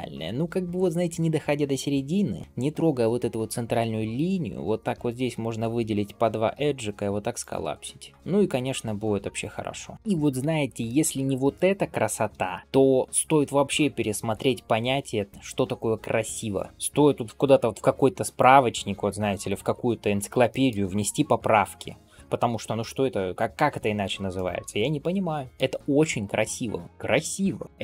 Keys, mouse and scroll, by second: 0.0 scroll down 1, 0.4 scroll up 1, 8.0-9.9 middle drag, 10.0-10.3 scroll up 1, 10.3 Tab, 10.7 middle drag, 11.4 click, 12.0 scroll down 1, 12.4 shift+middle click, 12.6-13.8 scroll up 1, 19.7 ctrl+s, 19.9-20.2 scroll down 1, 20.4 shift+middle click, 20.8 scroll up 1, 22.0-22.6 scroll down 1, 22.8-23.7 scroll up 1, 23.7 scroll down 1, 24.2 shift+middle click, 25.5 middle click, 26.8 ctrl+s.